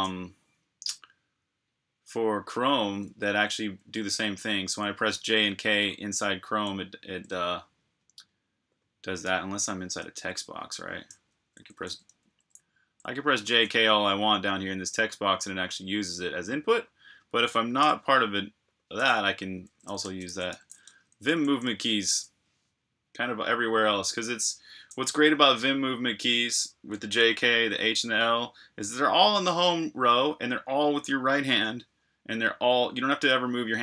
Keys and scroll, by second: 3.0-6.0 typing, 8.2 typing, 11.1-13.4 typing, 15.5 typing, 17.7 BackSpace, 19.2-21.3 typing, 24.0 typing.